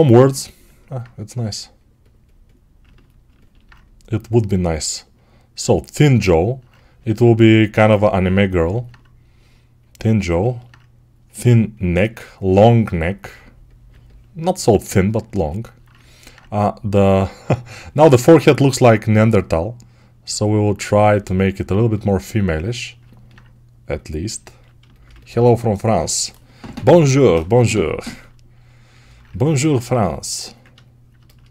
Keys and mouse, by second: 15.7-24.2 ctrl+alt+drag, 24.2-29.8 ctrl+right drag, 29.5 1, 29.8-31.5 ctrl+drag.